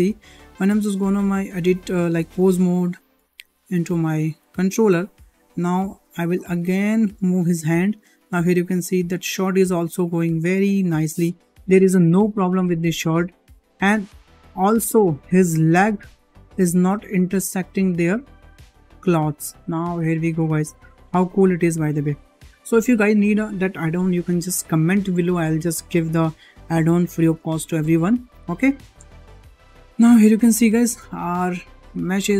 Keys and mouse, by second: 0.1 click, 2.3 ctrl+Tab, 3.2 shift+middle drag, 4.0 shift+middle drag, 5.5 middle drag, 6.2 shift+middle drag, 6.5 middle click, 7.5 g, 13.5 shift+middle click, 14.0-14.3 middle drag, 14.5 shift+middle drag, 14.9-15.3 middle drag, 15.8 click, 16.7 g, 22.4-22.8 middle drag, 29.8 `, 31.1 shift+middle drag.